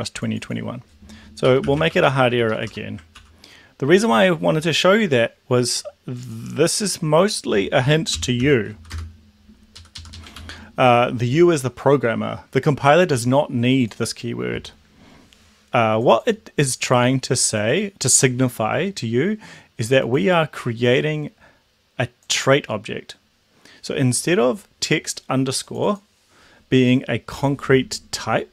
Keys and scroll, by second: 1.3-3.2 typing, 3.2 ctrl+a, 8.0-9.3 typing, 9.9 Left, 10.1 Left, 10.3 ctrl+s.